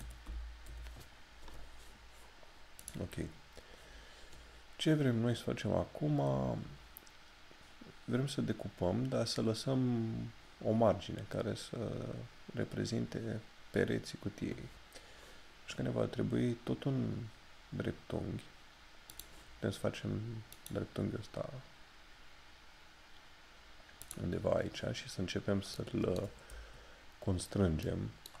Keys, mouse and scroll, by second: 0.7 Return, 2.9 click, 19.2 click, 24.1 click, 25.4 scroll down 1, 25.8 middle click, 26.7 shift+scroll up 1, 27.9 middle click.